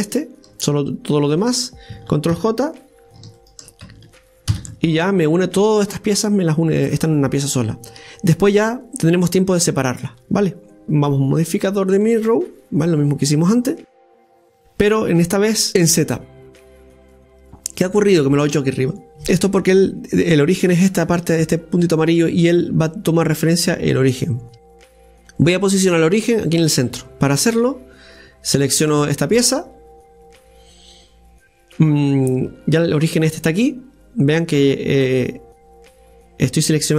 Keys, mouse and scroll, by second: 2.3 ctrl+j, 3.4 shift+right click, 4.5 ctrl+j, 7.0-7.3 scroll down 1, 7.3-10.8 middle drag, 10.8-13.1 drag, 15.7 click, 16.6 click, 24.5 KP_1, 24.7-27.7 scroll up 1, 27.7 scroll up 3, 28.0-31.0 right drag.